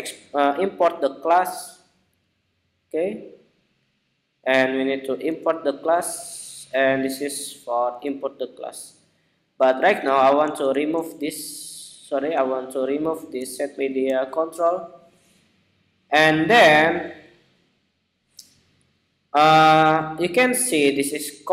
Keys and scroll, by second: 4.9 alt+Return, 7.5 alt+Return.